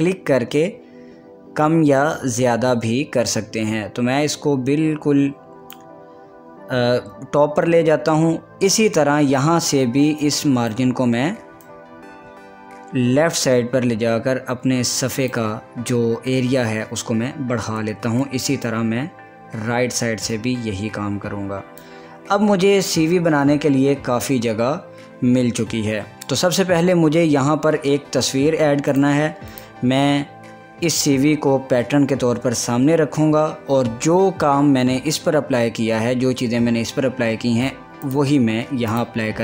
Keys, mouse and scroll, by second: 10.5-17.8 drag, 18.7-22.7 drag, 22.7-23.3 scroll up 1, 23.3 scroll down 1, 24.5 scroll up 1, 29.0 click, 29.9 click, 30.3 scroll up 1, 38.1 click, 39.0 click.